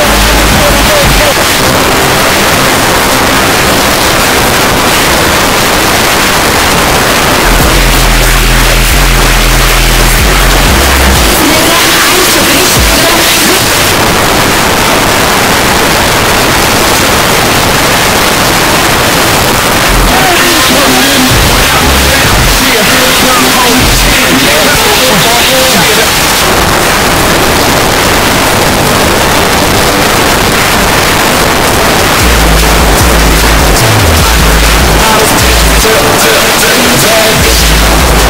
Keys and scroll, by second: 1.3 Page_Down, 13.6 Page_Down, 26.1 Page_Down, 38.2 space.